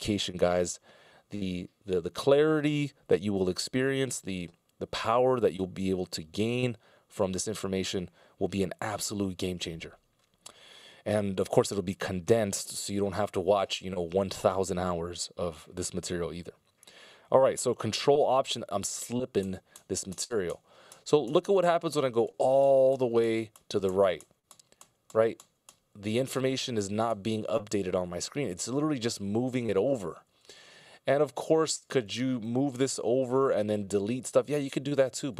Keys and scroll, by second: 18.5 ctrl+alt+Right, 19.0 ctrl+alt+Left, 19.4 ctrl+alt+Right, 20.1 ctrl+alt+Right, 20.7 ctrl+alt+Right, 21.1 ctrl+alt+Right, 21.5 ctrl+alt+Right, 22.4 ctrl+alt+Right, 23.0 ctrl+alt+Right, 23.6 ctrl+alt+Right, 24.5 ctrl+alt+Right, 25.5 ctrl+alt+Right, 25.9 ctrl+alt+Right, 26.9 ctrl+alt+Right, 27.8 ctrl+alt+Left, 28.6 ctrl+alt+Left, 29.0 ctrl+alt+Left, 29.9 ctrl+alt+Left, 30.3 ctrl+alt+Left.